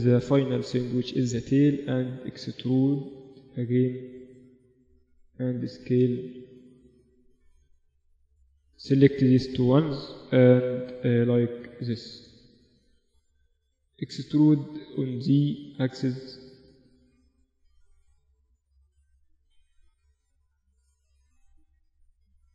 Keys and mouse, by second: 0.4 g, 2.4-3.6 right drag, 3.2 e, 5.2 s, 6.9 ctrl+r, 9.0-11.0 right drag, 9.6-11.4 drag, 11.4 middle click, 11.9 Tab, 13.4 Tab, 15.1-16.1 right drag, 15.1 e, 17.1-18.8 drag, 19.1-21.3 right drag, 19.8 s, 21.6 middle click, 22.4-22.5 right drag.